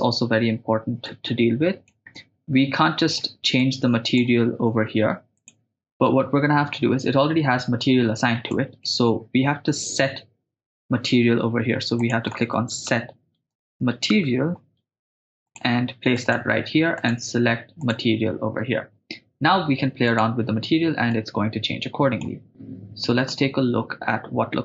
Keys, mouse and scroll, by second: 1.0 click, 2.2-3.2 middle drag, 3.6 click, 3.8 click, 5.4-8.3 drag, 11.0 middle click, 11.0 shift+a, 17.0-18.1 drag, 20.2 click.